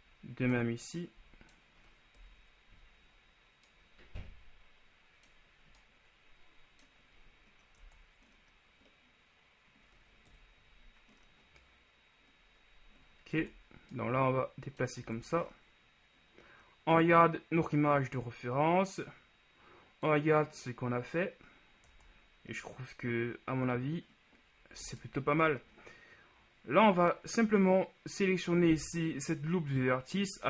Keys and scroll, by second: 2.3 KP_1, 8.0 Tab, 10.4 KP_1, 13.5 Tab, 22.1 Tab.